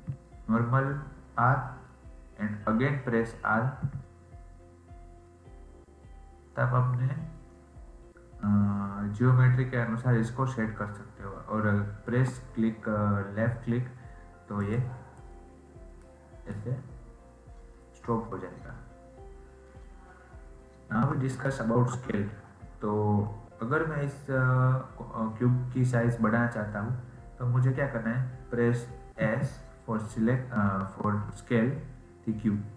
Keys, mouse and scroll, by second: 16.0 middle click, 16.6 scroll down 1, 16.7 scroll up 3, 20.2-21.4 scroll down 3, 21.4-24.4 shift+middle drag.